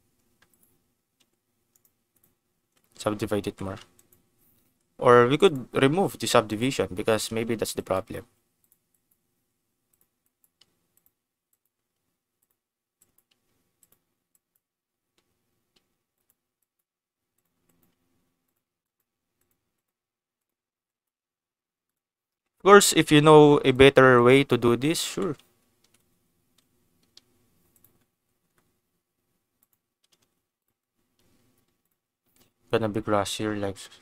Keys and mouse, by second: 0.5 click, 1.1 a, 1.7 click, 2.6 Tab, 3.3 Tab, 3.9 click, 4.6 Tab, 5.4 click, 6.5 click, 7.1 Tab, 7.8 click, 8.1 g, 8.5 click, 8.9 click, 9.4 g, 9.9 click, 10.2 click, 10.5 g, 10.9 click, 11.5 click, 11.7 g, 12.3 click, 13.0 click, 13.3 g, 13.7 click, 14.3 click, 15.7 g, 16.1 click, 16.5 click, 17.0 g, 17.3 click, 17.6 click, 17.9 g, 18.4 click, 18.7 click, 19.3 click, 19.3 g, 19.7 click, 19.9 g, 20.3 click, 20.8 click, 21.1 g, 21.8 click, 22.8 click, 23.1 g, 23.6 click, 24.1 click, 24.5 g, 24.9 click, 25.0 Tab, 25.8 ctrl+s, 26.5 s, 27.7 click, 28.3 s, 28.4 x, 29.5 click, 30.0 s, 30.1 x, 30.5 click, 31.3 g, 31.8 click, 32.3 g, 33.1 click, 33.6 g.